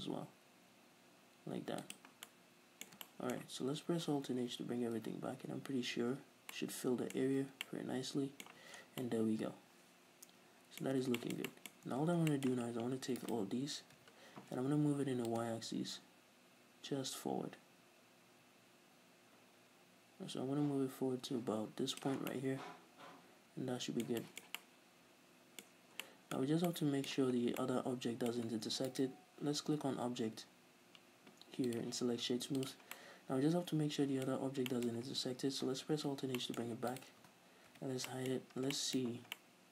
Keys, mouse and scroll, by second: 2.0 click, 2.2 scroll down 2, 2.4-4.6 middle drag, 4.5 alt+h, 5.2 middle click, 5.2 scroll up 2, 5.5 Tab, 6.4 scroll down 2, 6.8-7.2 middle drag, 7.3-9.9 middle drag, 7.3 z, 8.8 z, 9.0 scroll down 2, 10.1-11.1 middle drag, 11.0 scroll up 2, 11.6-13.3 middle drag, 11.8 scroll up 2, 12.0 Tab, 13.3 right click, 14.1 l, 15.4-22.3 drag, 22.2-25.8 middle drag, 22.3 scroll down 1, 25.8-26.1 scroll up 2, 25.9-27.6 middle drag, 27.2 Tab, 27.5 scroll down 2, 27.7-28.2 middle drag, 29.1 right click, 31.8-33.1 drag, 33.1-37.1 middle drag, 34.4-34.8 scroll up 2, 36.1 alt+h, 37.1 right click, 37.8 h, 38.2-39.7 middle drag, 38.5-39.5 scroll up 4.